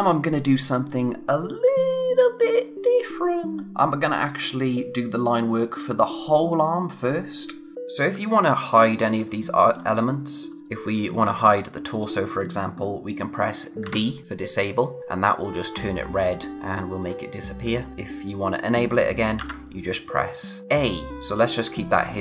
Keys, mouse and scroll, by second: 7.7-8.2 scroll down 1, 8.2 space, 8.5 click, 8.7 space, 9.4 click, 9.4 space, 10.6 click, 11.2 scroll up 1, 11.9 click, 13.8 d, 19.3 a, 21.1 d.